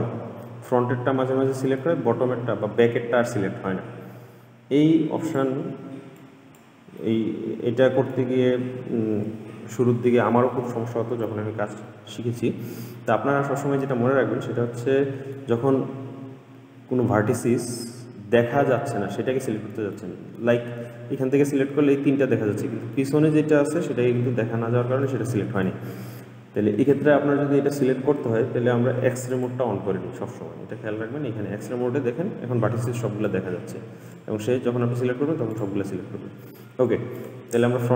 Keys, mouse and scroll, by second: 5.5 click, 6.4 click, 7.2-10.3 middle drag, 14.0-17.0 middle drag, 17.6-21.1 middle drag, 21.1 click, 23.1-28.2 middle drag, 29.5 click, 33.4 click, 35.7 click, 37.3 click.